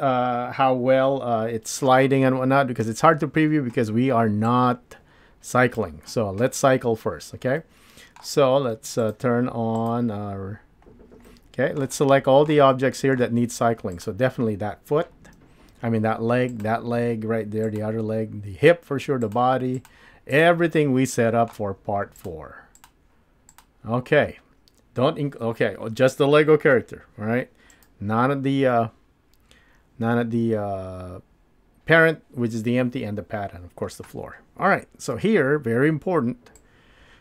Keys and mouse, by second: 12.1 middle click, 12.7 shift+middle click, 16.5 shift+click, 17.6 shift+click, 20.4 shift+click, 20.8-21.5 middle drag, 22.2-27.3 shift+drag, 27.3 g, 36.6 click.